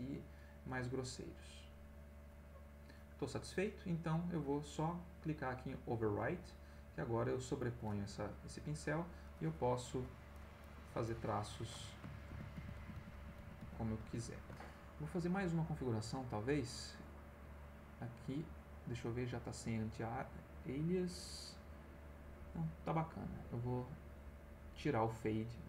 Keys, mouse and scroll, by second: 6.2 click, 7.5 click, 8.4 middle click, 9.2 click, 9.9-11.9 drag, 12.3 ctrl+z, 16.0 click, 17.7 click, 24.8-25.6 drag.